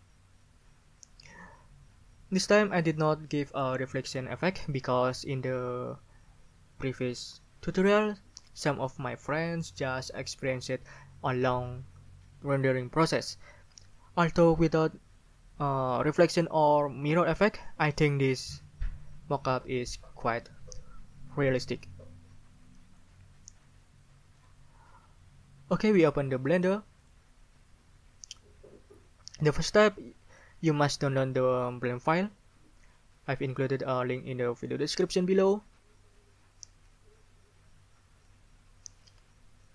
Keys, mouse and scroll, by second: 24.4 click, 24.5 middle click, 24.5 click, 27.0 click.